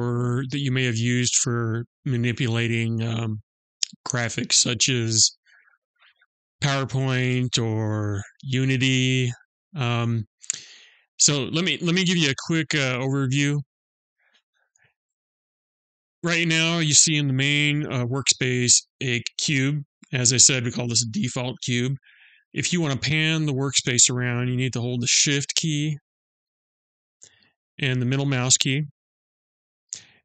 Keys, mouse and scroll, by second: 27.1 shift+middle click.